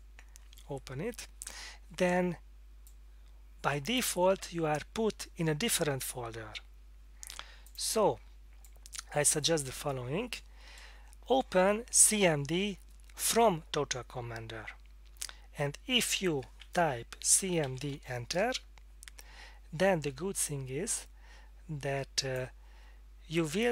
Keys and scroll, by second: 17.3-18.1 typing, 18.3 Return.